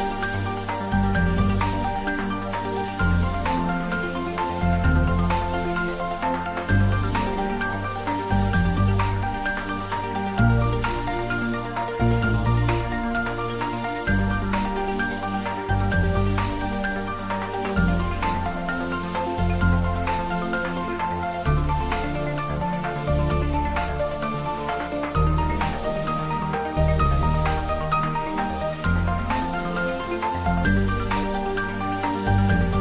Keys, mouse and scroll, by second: 0.0-0.5 typing, 0.1 click, 1.7 typing, 8.5 click, 9.1 scroll up 1, 14.0 click, 19.5-20.4 scroll down 1, 20.9-21.6 middle click, 21.9-22.2 scroll up 1, 26.6-28.3 scroll down 1.